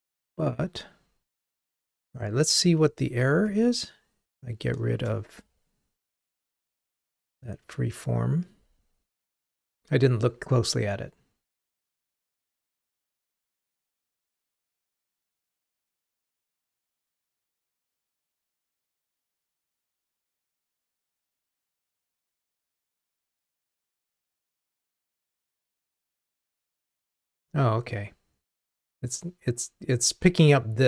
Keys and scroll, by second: 2.4 super+BackSpace, 6.5 ctrl+r.